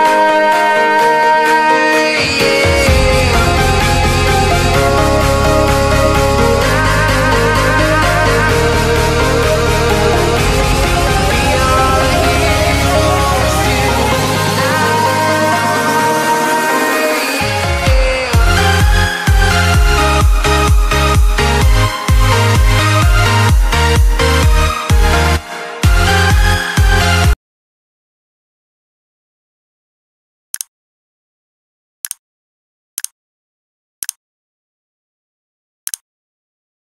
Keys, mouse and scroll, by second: 0.5 click, 0.7 Left, 1.8 Right, 2.4 alt+scroll down 1, 3.6 ctrl+s, 4.6 ctrl+shift+s, 5.5 click, 8.0 s, 9.4 click, 22.2 ctrl+c, 22.6 click, 23.0 ctrl+v, 24.4 click.